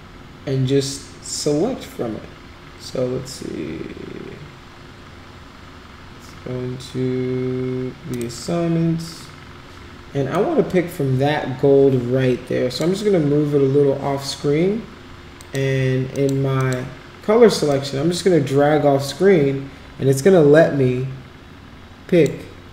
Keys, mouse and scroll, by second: 8.1 click, 10.4-12.8 drag, 15.4 click, 16.2 click, 16.6 click, 17.7-22.3 drag.